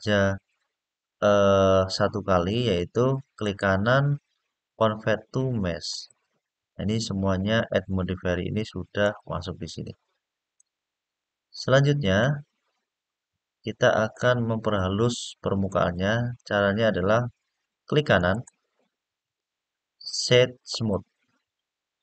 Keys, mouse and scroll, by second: 3.2-5.8 right drag, 8.7 click, 10.3-11.9 middle drag, 12.2 scroll up 1, 12.8 scroll down 1, 13.9-15.4 middle drag, 18.0-20.7 right drag.